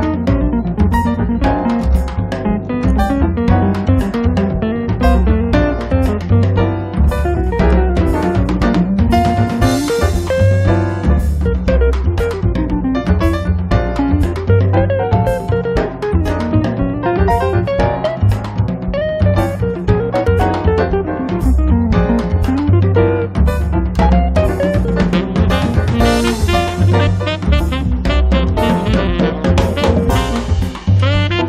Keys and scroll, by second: 0.7-2.0 typing, 6.2 space, 7.6 p, 9.1 p, 13.1 space, 13.7 Escape, 17.3 p, 19.7 space, 26.9 m, 27.8 Up, 29.3 p, 30.3 1, 30.6 0, 30.9 Return.